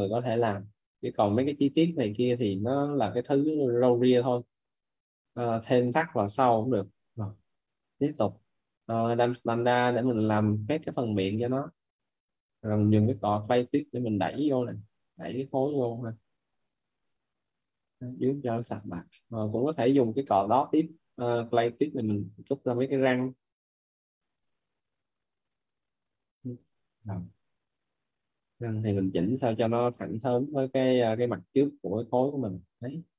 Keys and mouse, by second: 0.7 shift+l, 2.3 click, 7.1-8.4 typing, 8.6 right click, 9.4 click, 12.4-13.6 typing, 13.7 click, 17.7 click, 18.6 right click, 18.9 right click, 21.8 click, 26.1 right click, 27.4-28.5 typing, 28.4 right click, 29.6 click.